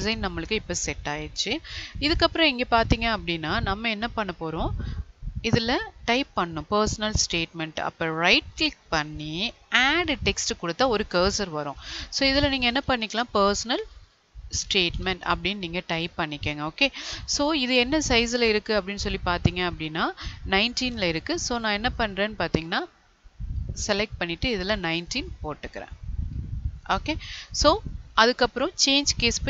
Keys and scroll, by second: 13.2 space.